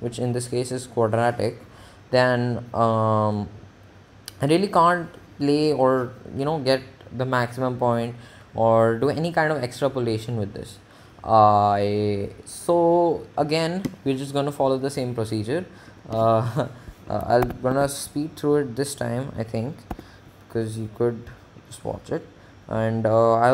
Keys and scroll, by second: 17.3 Menu, 18.0 4, 18.5 1, 20.1 6.